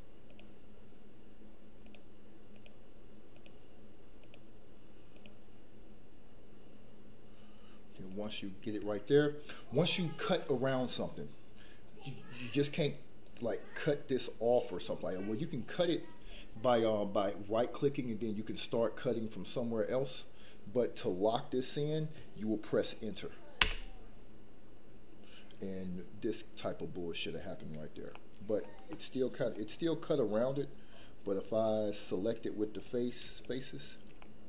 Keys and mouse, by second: 28.1 middle click, 28.9 middle click, 32.7 click, 33.3 shift+click, 34.2 middle click.